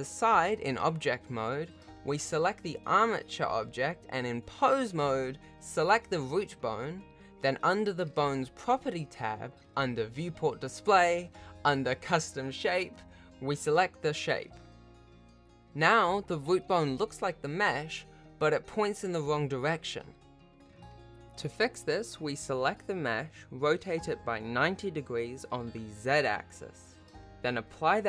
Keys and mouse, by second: 0.0 g, 2.3 click, 3.3 ctrl+Tab, 4.8 click, 7.5 click, 8.8-10.8 drag, 12.0 ctrl+Tab, 13.1 r, 16.0 ctrl+a, 18.0 r, 22.0 r, 23.9 ctrl+z.